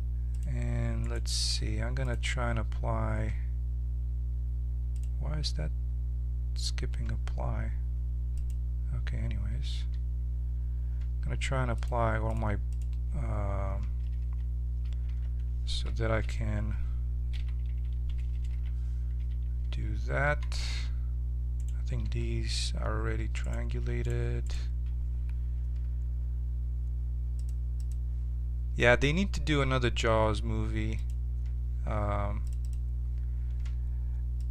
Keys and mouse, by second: 0.3 click, 2.7-11.1 drag, 9.7 z, 11.7-15.0 drag, 15.0 Tab, 17.3 a, 17.6 a, 18.5 ctrl+t, 19.1 Tab, 20.2 z, 20.6 z, 21.5-24.6 drag, 22.0 z, 24.6-26.3 right drag, 27.3-31.0 drag, 32.7-34.5 drag.